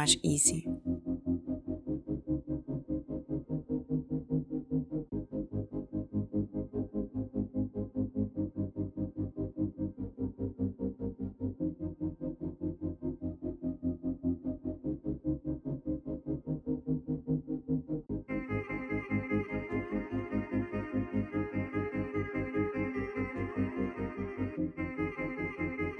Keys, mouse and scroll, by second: 0.0-1.1 typing, 1.5 Return, 3.1 space, 4.7 space, 5.1 middle click, 5.2 scroll, 5.2 space, 5.8 scroll, 5.8 space, 6.1 middle click, 7.6 scroll, 8.8 shift+click, 9.4 space, 10.1-11.1 scroll, 10.2 space, 12.5 shift+click, 12.7 space, 13.4 space, 14.5 click, 18.1 click, 18.3-19.0 typing, 20.9-21.7 typing, 23.6 click, 23.9 click.